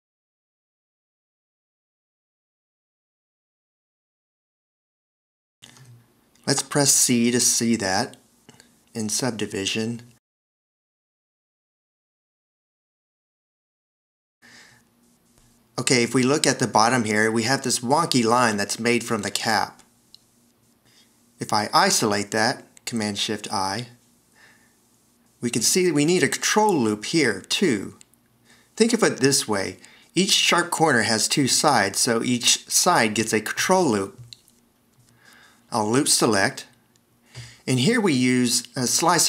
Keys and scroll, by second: 5.7 c, 10.2 shift+1, 23.8 shift+super+i, 30.8 v, 37.6 alt+e.